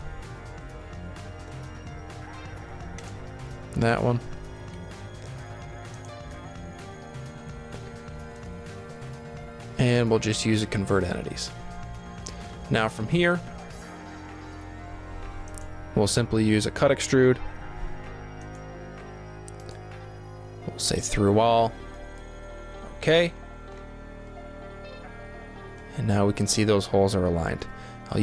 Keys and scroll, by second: 4.3 g, 13.9 s, 17.6 s, 27.0 d.